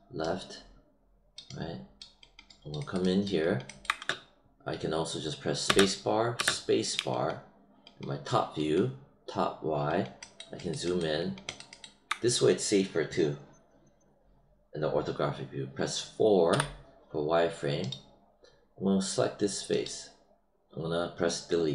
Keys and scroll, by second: 5.6 space, 16.4 4.